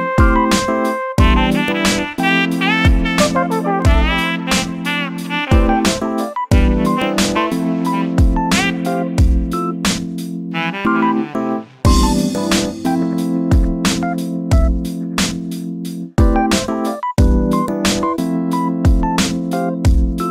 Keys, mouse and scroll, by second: 0.3 u, 3.0-4.1 drag, 7.6 middle click, 8.5-17.1 middle drag, 17.1-20.3 drag.